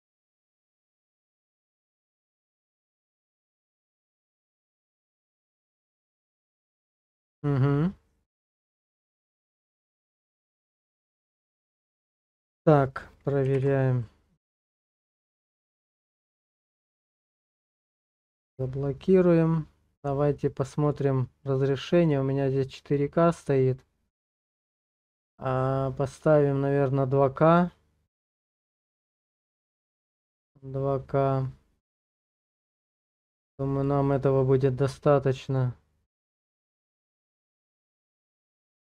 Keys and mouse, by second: 16.9 Page_Down, 20.8 click, 22.0-26.2 drag, 35.5 click.